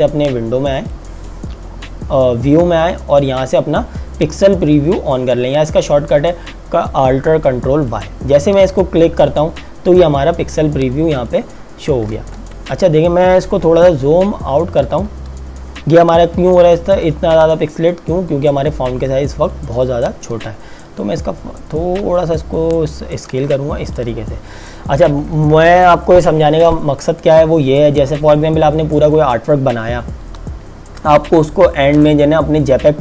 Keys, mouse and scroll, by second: 8.0 click, 11.2 click, 12.3 ctrl+KP_Add, 13.2 ctrl+KP_Subtract, 17.0 click, 23.9 click, 30.9 ctrl+Num_Lock, 31.1 ctrl+KP_Add, 32.0 click, 32.4 space.